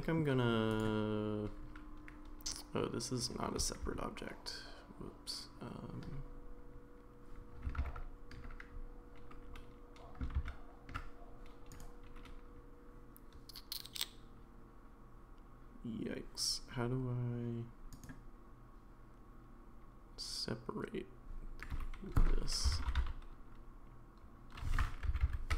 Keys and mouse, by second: 0.7 click, 3.8 ctrl+z, 7.8 ctrl+z, 10.4 ctrl+x, 11.7-16.3 right drag, 18.0 right click, 21.7 space, 25.2 Down.